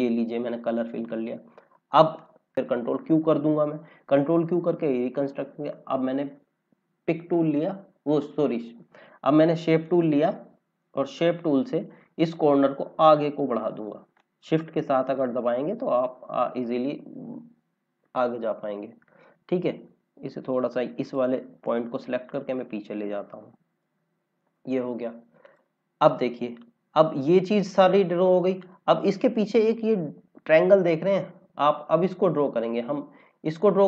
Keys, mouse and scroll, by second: 2.9 ctrl+q, 7.0 click, 9.7 click, 11.0 scroll up 1, 12.1 click, 16.6 scroll down 1, 28.3-28.8 scroll up 1, 31.4-31.7 scroll down 1.